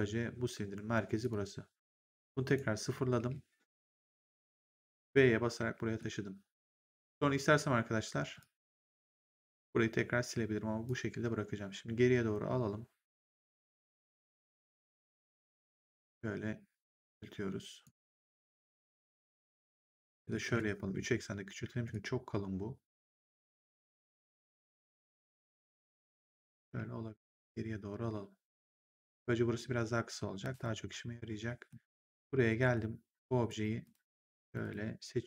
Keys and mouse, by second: 1.1 click, 2.4 click, 3.1 w, 5.8 middle click, 5.8 v, 8.3 click, 10.8 click, 14.4 r, 16.0 click, 20.3 ctrl+z, 21.8 click, 26.6 w, 27.2 click, 30.4 click, 31.9 ctrl+1, 33.4 right click, 33.7 click, 34.4 shift+click.